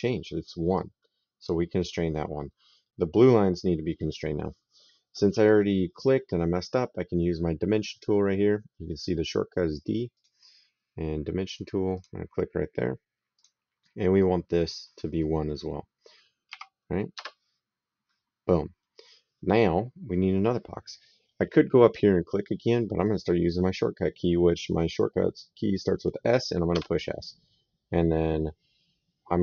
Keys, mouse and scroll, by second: 0.6 click, 9.9 click, 11.8 click, 13.1 click, 16.3 KP_1, 16.9 Return, 26.5 s.